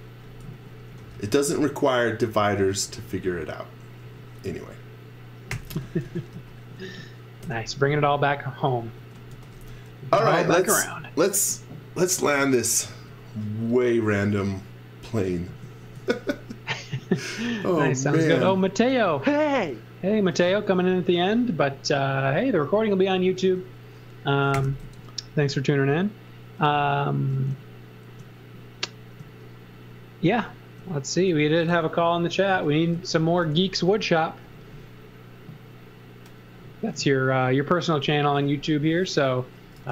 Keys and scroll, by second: 0.2-2.8 typing, 4.0 space, 5.3-7.4 typing, 9.0-10.0 typing, 15.6 z, 15.9 x, 17.5 x, 18.9 x, 20.1 c, 23.4 space, 24.5 g, 24.8 z, 25.4 space, 31.3-34.4 typing, 39.7 x.